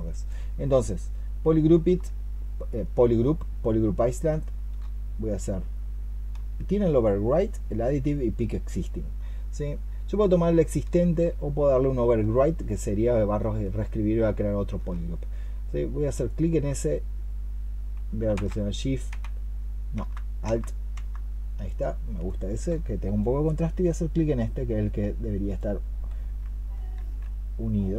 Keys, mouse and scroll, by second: 1.8-4.6 space, 6.2-10.9 space, 12.2-14.6 space, 18.2 space, 26.8 ctrl+z.